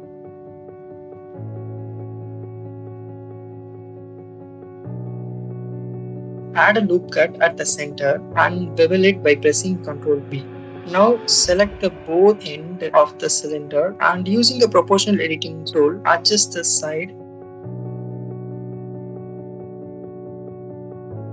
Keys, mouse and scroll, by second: 0.4 alt+click, 1.0 shift+middle click, 2.3 alt+click, 6.9 ctrl+z, 7.1 ctrl+r, 8.3 click, 8.7 ctrl+b, 10.8 click, 11.6 click, 12.5 alt+shift+click, 12.6 ctrl+z, 12.8-17.6 drag, 18.3-20.3 shift+middle drag, 21.0-21.3 drag.